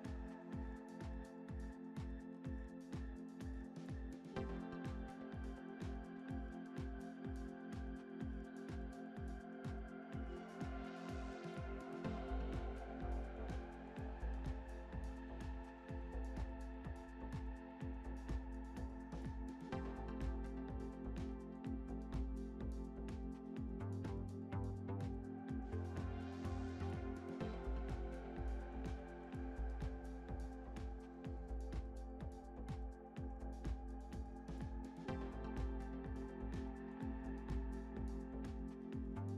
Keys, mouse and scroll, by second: 2.7 ctrl+r, 5.2 alt+s, 9.3-11.9 middle drag, 11.9-13.1 scroll down 7, 13.5 KP_Decimal, 14.4-14.8 scroll down 6, 14.8-17.1 middle drag, 17.1-17.7 scroll up 2, 18.0 scroll up 3, 18.0 middle click, 21.9 click, 23.9 click, 26.3-26.8 scroll down 4, 26.8 shift+middle click, 27.8-28.3 scroll down 4, 28.3-29.4 scroll up 2, 29.4 click, 31.5 click, 31.5 Tab, 32.0 click, 32.6-33.5 scroll down 6, 33.5 shift+middle drag, 33.9-34.7 middle drag, 34.7 KP_0, 35.7-36.2 scroll down 6, 36.7-38.6 middle drag, 36.7 scroll down 1, 38.6 scroll up 1, 39.2-39.3 scroll up 1.